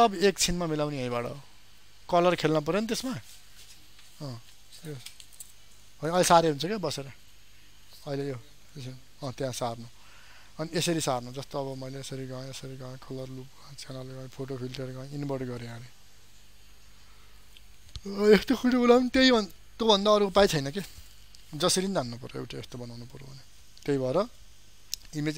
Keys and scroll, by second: 22.6 ctrl+alt+z.